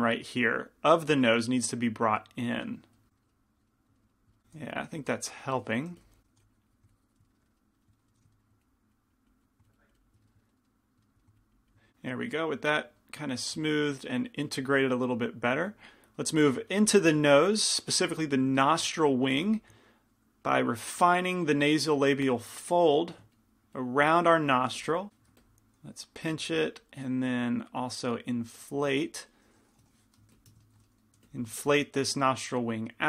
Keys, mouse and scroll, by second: 1.0-3.4 drag, 1.3 f, 4.7 f, 6.1 f, 6.4 f, 6.6-7.7 drag, 8.2 f, 8.7-10.2 drag, 10.5 click, 10.5 middle click, 11.4-13.4 drag, 11.4-15.7 middle drag, 17.3 shift+c, 17.3 f, 18.3 f, 19.6 f, 20.2-25.5 drag, 22.7-24.8 middle drag, 24.8 f, 25.5 f, 25.5 p, 26.0-30.4 drag, 27.2 middle click, 30.4 i, 30.4 f, 31.3 f, 32.4-33.0 drag.